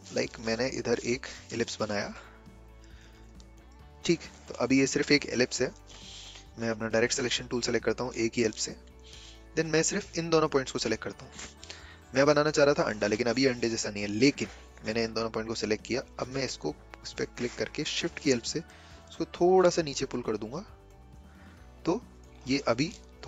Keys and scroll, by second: 6.8 a, 17.8 a.